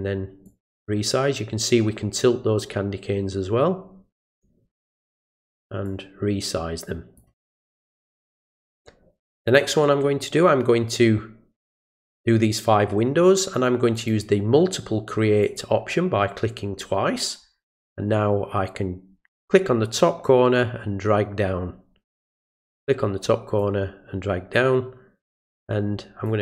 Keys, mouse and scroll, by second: 0.4-5.0 drag, 5.8-7.2 drag, 13.9 click, 15.4 click, 19.4-22.2 drag, 23.6-25.2 drag, 26.2-26.4 drag.